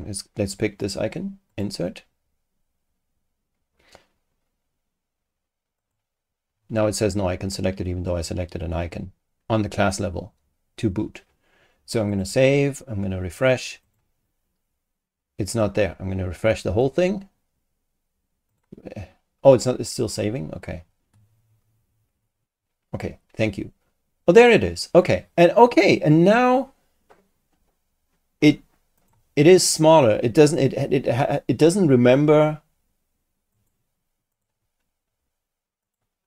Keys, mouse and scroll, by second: 1.5 click, 5.8 click, 12.1 click, 13.8 click, 16.8 click, 18.5 click, 29.0 click, 33.5 click, 34.3 click, 35.8 click.